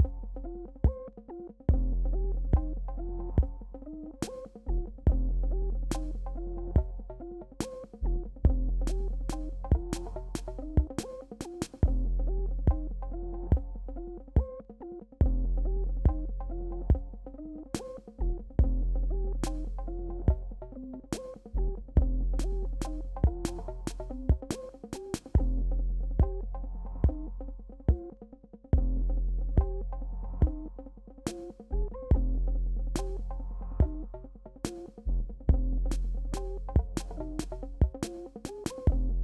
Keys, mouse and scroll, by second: 1.8 click, 3.1 alt+scroll up 1, 4.6 p, 5.6 alt+scroll up 1, 6.1 alt+scroll up 1, 7.2 click, 7.2 click, 8.1 BackSpace, 10.1 click, 11.2 right click, 11.8 click, 12.0 Return, 12.5 space, 12.7 click, 12.8 space, 13.6-15.5 drag, 16.3 Return, 16.8 space, 16.9 click, 17.1 space, 17.5-19.2 drag, 19.4 right click, 19.9 click, 20.1 Return, 21.3 click, 24.1 Return, 24.7 BackSpace, 25.9 alt+scroll down 1, 26.4 alt+scroll up 1, 26.7 click, 28.1 right click, 28.7 click, 30.8 alt+scroll down 1, 31.3 space, 31.4 click, 31.6 space, 32.0 p, 32.5 alt+scroll up 1, 33.0 click, 33.3 ctrl+z, 33.5 alt+scroll down 1, 34.0 BackSpace, 34.9 alt+scroll up 1, 35.4 click, 36.4 ctrl+z, 36.6 alt+scroll up 1, 36.9-38.9 drag, 39.1 right click.